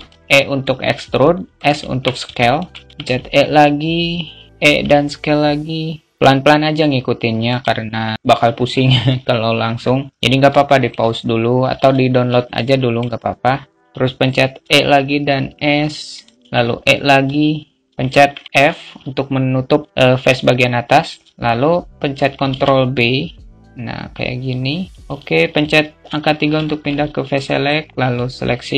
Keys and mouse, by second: 2.3 alt+shift+middle click, 10.1 alt+shift+middle click, 11.8 alt+z, 12.0 shift+middle click, 13.2 click, 16.2 alt+middle click, 19.6 alt+middle click, 22.0 ctrl+b, 26.0 alt+middle click, 26.2 a, 26.9 click, 27.5 alt+middle click.